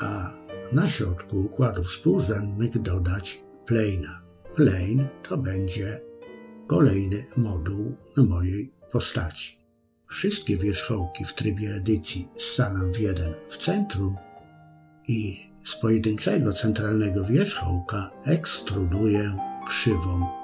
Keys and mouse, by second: 0.9-2.6 drag, 3.0-3.6 middle drag, 4.8 Tab, 8.3 m, 10.2 KP_3, 11.3 shift+middle click, 14.4 e.